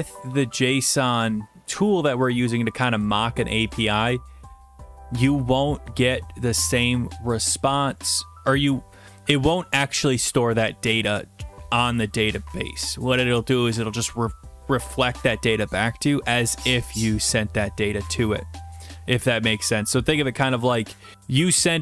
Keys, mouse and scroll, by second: 1.4 BackSpace, 2.3 click, 3.3 click, 4.7 click.